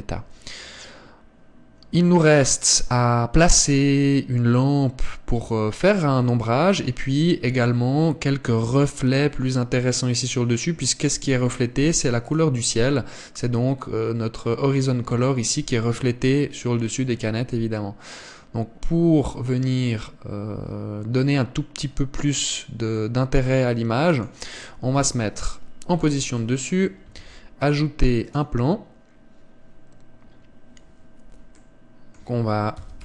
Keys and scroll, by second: 23.0 Escape, 25.8 KP_7, 28.0 shift+a.